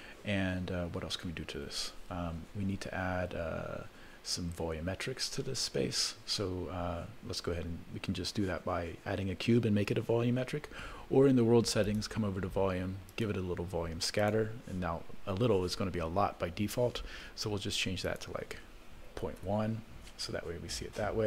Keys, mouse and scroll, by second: 1.9 ctrl+s, 11.8 click, 13.1-14.9 drag, 18.0-19.6 drag.